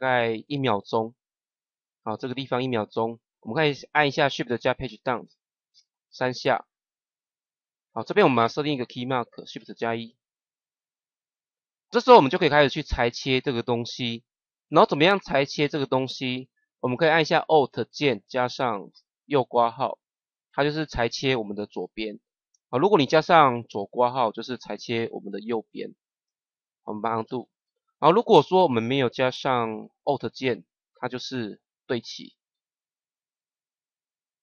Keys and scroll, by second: 4.8 shift+Page_Down, 9.5 shift+1, 18.8 alt+[, 22.2 ctrl+z, 23.6 alt+], 27.2 ctrl+z, 30.1 [.